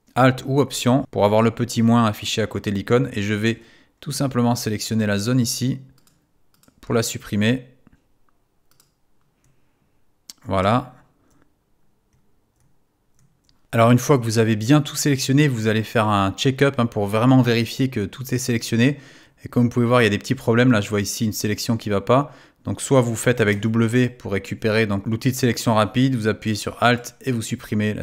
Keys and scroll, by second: 23.5 w.